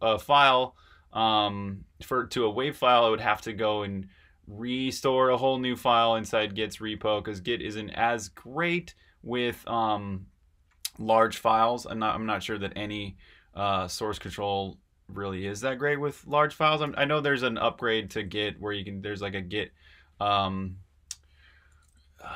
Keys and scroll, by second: 16.8 super+w, 18.0 super+w, 22.1 super+`.